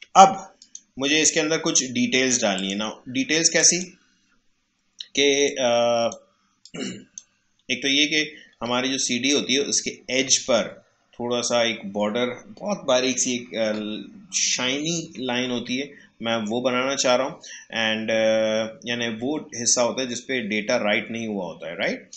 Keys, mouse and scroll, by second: 0.6-8.8 drag, 8.8 alt+scroll up 1, 15.6 alt+scroll up 1, 15.9-16.7 alt+scroll down 1, 18.2 scroll down 1, 19.3 alt+scroll down 1, 20.4 alt+scroll up 1, 21.3 alt+scroll down 1, 22.1 click.